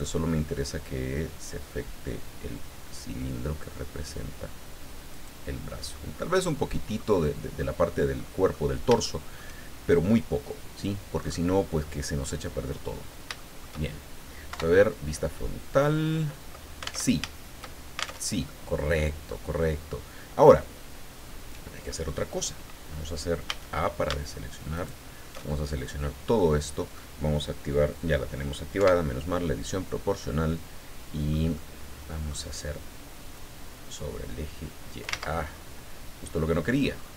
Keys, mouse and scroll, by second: 1.0-1.7 scroll down 4, 2.6 scroll down 2, 5.1 click, 5.6-5.9 scroll down 1, 5.9-7.1 middle drag, 8.2 middle click, 9.0 shift+middle click, 9.8 shift+scroll down 1, 10.7-11.0 scroll down 1, 11.2-11.5 scroll up 2, 12.5-13.2 scroll down 4, 13.4 shift+middle click, 14.5 KP_1, 15.8 scroll up 2, 17.0 alt+Tab, 18.3 alt+Tab, 18.4-19.5 alt+middle drag, 21.2-21.5 scroll up 2, 22.2 scroll up 2, 23.4 a, 24.7 alt+shift+right click, 25.5-26.2 alt+shift+scroll down 5, 26.4 middle click, 28.8 KP_7, 29.9-31.4 middle drag, 31.5 middle click, 33.3-35.2 drag, 35.2 ctrl+z, 35.5-36.5 ctrl+middle drag, 36.7-37.1 scroll up 2.